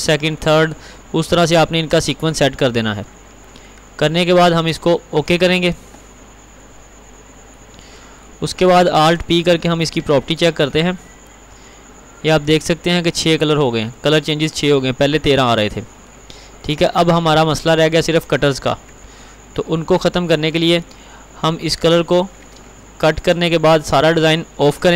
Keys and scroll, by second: 10.4 alt+p, 23.1 ctrl+x.